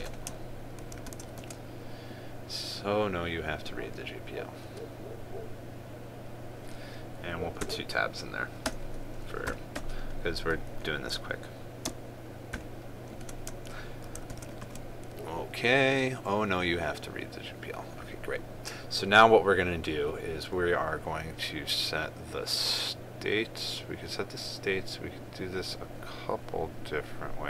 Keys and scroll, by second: 1.6 ctrl+s, 2.0 ctrl+s, 14.8 ctrl+s.